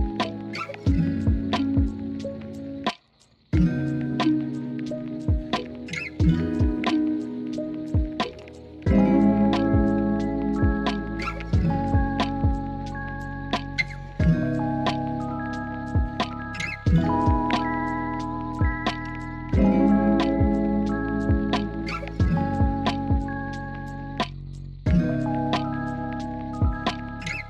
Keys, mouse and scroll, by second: 0.4 s, 7.2 g, 7.6 g, 9.7 Tab, 10.6 middle click, 11.0 alt+z, 12.2 middle click, 13.3 Tab, 14.4 KP_1, 15.0 alt+z, 19.2 s, 19.5 click, 19.8 Tab, 24.7 click.